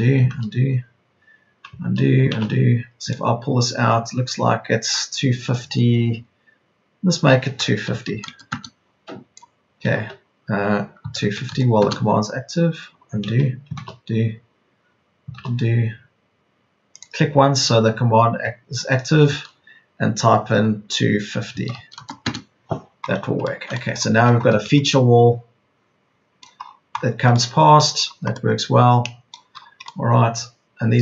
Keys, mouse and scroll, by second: 0.3 ctrl+z, 1.8 ctrl+z, 2.3 ctrl+z, 7.8 KP_2, 8.0 KP_5, 8.2 KP_0, 11.0 KP_2, 11.2 KP_5, 11.4 KP_0, 13.2 ctrl+z, 13.8 ctrl+z, 16.9 ctrl+z, 21.4 KP_2, 21.7 KP_5, 21.9 KP_0, 24.2 Escape.